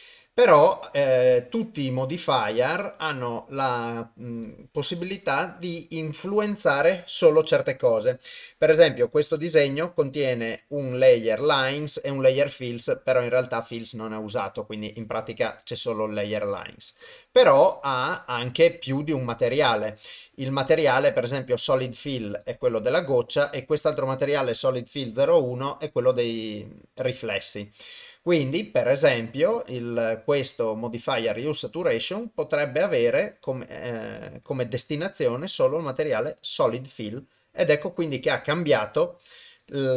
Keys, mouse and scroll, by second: 0.7 click, 2.1 click, 4.5 click, 9.3 click, 10.9 click, 11.4 click, 11.9 click, 12.2 click, 15.6 click, 21.8 click, 22.3 click, 24.5 click, 25.4 click, 26.3 click, 29.1 click, 32.8-36.3 drag.